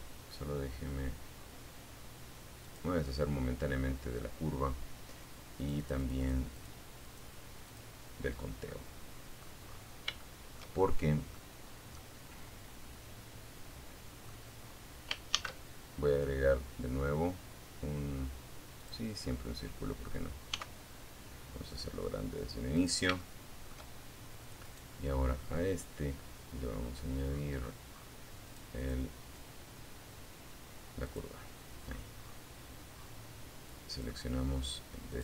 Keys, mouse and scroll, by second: 0.8 click, 3.8 click, 4.8 click, 5.2 click, 5.8 click, 6.9 middle click, 7.8-8.3 scroll up 1, 8.4 shift+middle click, 9.1 shift+middle click, 9.8-10.2 scroll down 2, 10.2-12.6 middle drag, 12.8 scroll up 2, 13.5 shift+a, 17.0 click, 18.7 s, 21.0 click, 21.4 shift+middle click, 22.8 right click, 25.4-26.4 scroll up 2, 26.6 click, 27.0 click, 29.2 click, 30.0-30.7 scroll down 2, 31.2 scroll down 1, 32.1 click, 33.3 click.